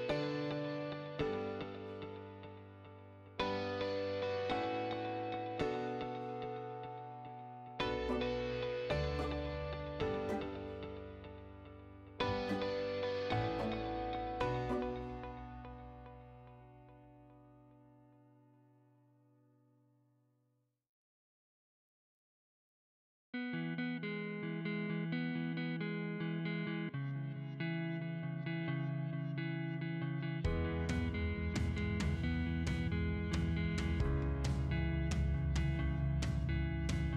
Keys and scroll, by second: 0.9 Escape, 13.5 c, 14.1 space, 17.6 c, 19.0 Escape, 21.2 b, 21.5 d, 21.7 space, 22.2 BackSpace, 23.4-25.1 typing, 27.6 c, 28.1 space, 33.8 m, 34.0 space.